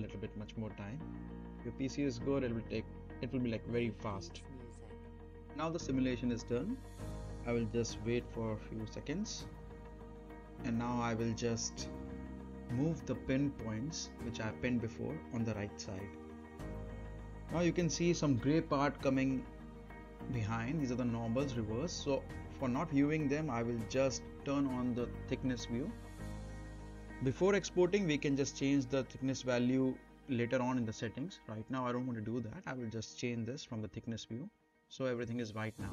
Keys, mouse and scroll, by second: 11.9 space, 12.2 scroll down 2, 12.3 middle click, 13.0 space, 13.5-15.1 drag, 19.8 scroll up 1, 20.3 space, 20.4-20.7 scroll up 1, 20.7 middle click, 20.8 scroll down 1, 20.9 middle click, 21.0 space, 27.5 space, 28.2 click, 28.6-29.3 right click, 29.4-30.1 middle drag, 30.9 click, 33.5-35.0 right click, 34.7 click.